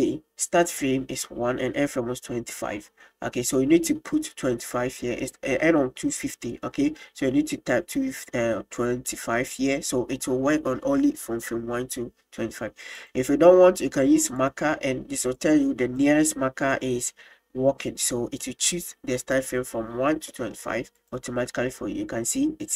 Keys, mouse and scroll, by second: 14.4 click, 18.8 click, 21.0-22.7 drag.